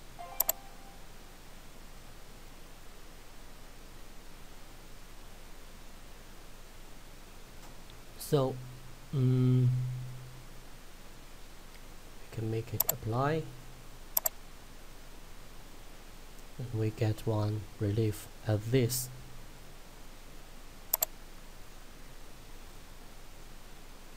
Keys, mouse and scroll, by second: 0.5 click, 1.3 scroll up 1, 1.9 scroll down 1, 2.7-4.9 scroll up 1, 11.4 scroll down 1, 13.0 click, 16.3 middle click, 21.0 click, 21.8 middle click, 23.9 scroll up 1.